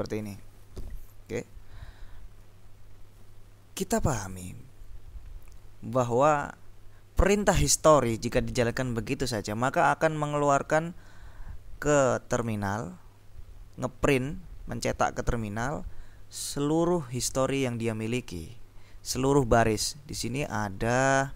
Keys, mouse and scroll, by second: 20.6 ctrl+l.